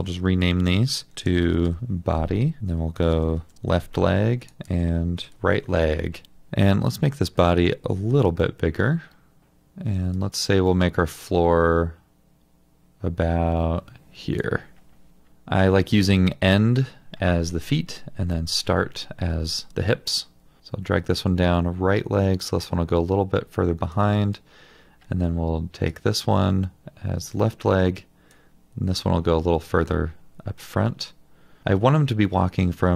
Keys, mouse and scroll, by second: 1.1-2.2 typing, 3.0 Return, 3.5 Return, 5.3 Return, 6.5 double click, 8.2 alt+click.